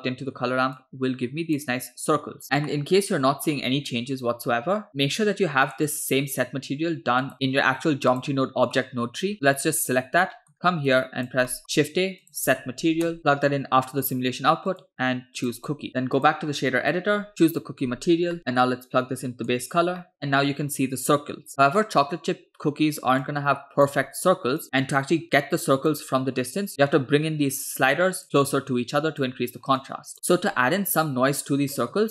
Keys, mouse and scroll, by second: 0.8-1.8 drag, 2.4 ctrl+z, 2.8 middle click, 4.9 middle click, 5.9 click, 7.3 click, 8.2 drag, 9.3 scroll down 2, 10.4 middle click, 10.5-10.9 scroll up 2, 10.9 click, 11.5 middle click, 11.6 shift+a, 13.2 BackSpace, 14.7-15.8 drag, 15.9 click, 17.3 click, 18.4 middle click, 18.7-19.6 drag, 20.0 middle click, 21.8 middle click, 22.3-22.9 scroll up 2, 23.2 click, 24.6-25.9 drag, 26.7 click, 27.6-28.2 drag, 28.4 click, 29.9 click, 30.1 ctrl+z, 30.2 middle click, 31.8 middle click.